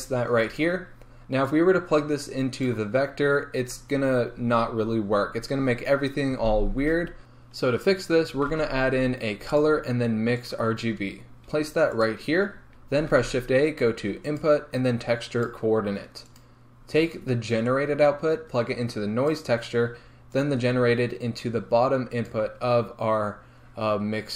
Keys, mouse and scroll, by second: 3.9 scroll up 1, 5.1 scroll down 1, 7.2 alt+click, 12.0 shift+a, 12.2 click, 19.4-20.5 drag.